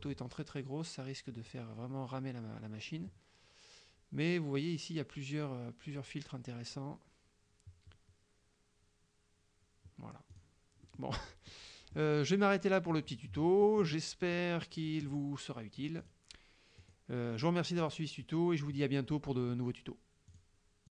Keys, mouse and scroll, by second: 10.4 click, 10.9 middle click, 11.6 middle click, 13.0 click, 13.6 middle click, 14.4 middle click, 16.1 click, 16.8 click, 17.9 click, 20.4 click.